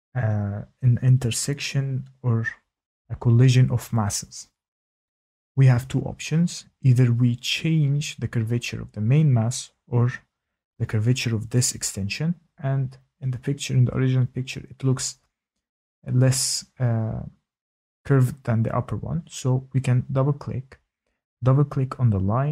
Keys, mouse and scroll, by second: 0.7 shift+middle click, 6.7-8.9 scroll, 12.0 click, 12.9-16.6 scroll, 16.6 click, 16.8 click, 17.8 click, 18.5 middle click, 18.6 middle click, 19.1 click, 19.1 middle click, 19.3 click, 20.3 middle click, 20.3 middle click, 21.0 middle click, 21.0 click.